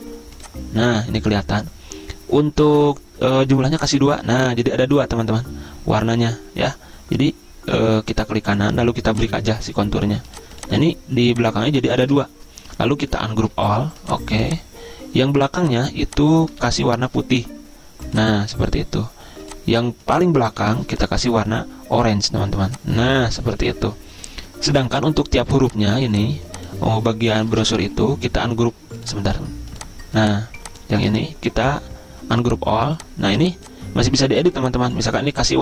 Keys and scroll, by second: 12.4 ctrl+z, 27.9 ctrl+z, 31.4 ctrl+z.